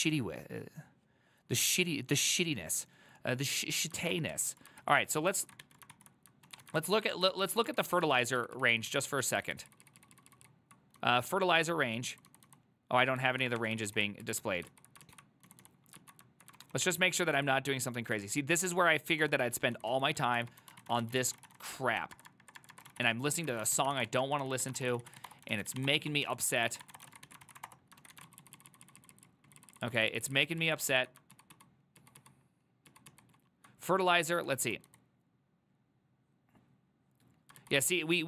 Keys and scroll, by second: 4.1 ctrl+a, 4.4 1, 4.9 ctrl+c, 5.5 ctrl+a, 5.7 2, 6.0 ctrl+c, 6.5 ctrl+a, 6.7 [, 6.9 ctrl+u, 7.0 ctrl+u, 7.4 ctrl+u, 7.6-11.1 ctrl+u, 11.1-13.9 typing, 13.9 ctrl+c, 14.0 ctrl+c, 14.3 ctrl+u, 14.8 ctrl+u, 15.1 ctrl+u, 15.5 typing, 16.1 ctrl+u, 16.6 ctrl+d, 16.8 ctrl+d, 16.8 typing, 18.2 ctrl+d, 19.3 ctrl+d, 19.6-28.2 typing, 27.5 ctrl+c, 27.7 Up, 27.7 Return, 28.1 ctrl+a, 28.3 ctrl+u, 28.5-34.1 ctrl+u, 34.1-34.8 typing, 37.4-38.2 typing.